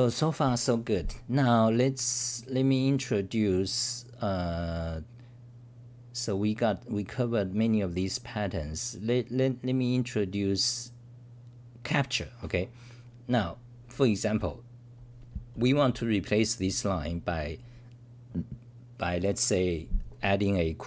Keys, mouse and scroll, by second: 15.7 t.